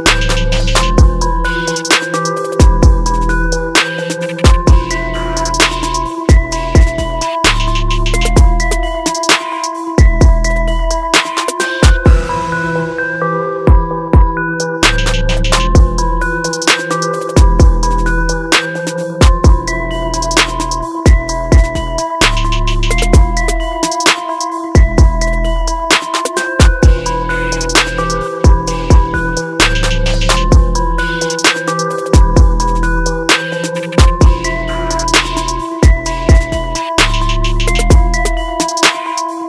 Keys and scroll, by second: 4.0 ctrl+alt+shift+e.